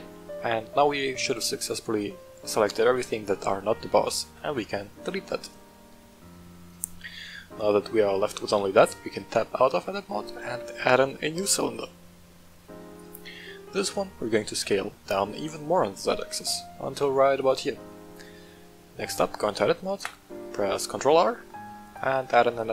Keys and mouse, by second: 1.1-1.5 middle drag, 2.0-3.2 middle drag, 3.9 middle drag, 4.2 x, 5.8-6.3 middle drag, 7.4 Tab, 8.0-8.3 middle drag, 10.4 shift+a, 13.9 s, 14.6 z, 17.3 click, 17.7-18.2 middle drag, 18.7 middle click, 19.3 Tab, 20.9 ctrl+r.